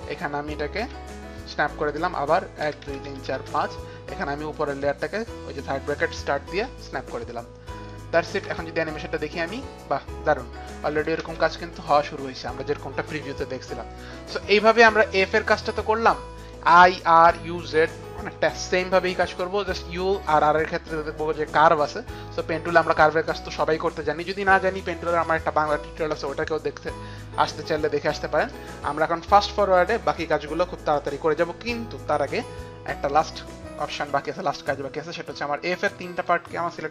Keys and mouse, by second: 0.2 Page_Down, 0.9 Page_Down, 2.7 Page_Down, 3.6 Page_Down, 4.9 click, 7.4 click, 7.6 click, 8.0 click, 8.5 space, 10.7 click, 10.7 space, 10.9 click, 10.9 space, 13.4 click, 13.4 space, 36.2 shift+click.